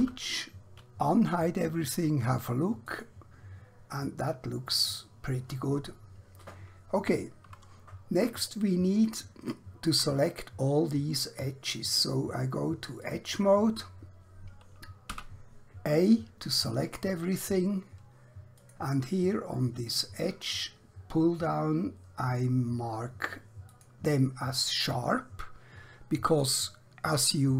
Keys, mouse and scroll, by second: 0.0 alt+h, 2.8 click, 4.1 middle click, 7.9 scroll up 1, 8.4-9.0 scroll down 1, 9.2 shift+middle click, 13.0 click, 15.1 a, 18.6 click, 23.6 click.